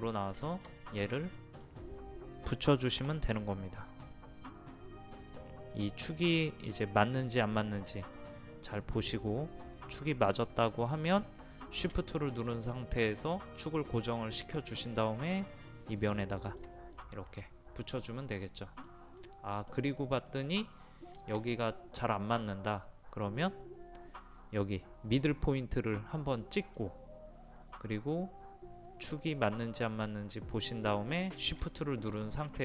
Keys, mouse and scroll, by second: 0.4 middle click, 0.9 click, 1.4 middle click, 1.9-3.0 scroll up 1, 3.0 scroll up 1, 3.7 click, 16.5 shift+click, 17.0-19.1 middle drag, 26.6 click.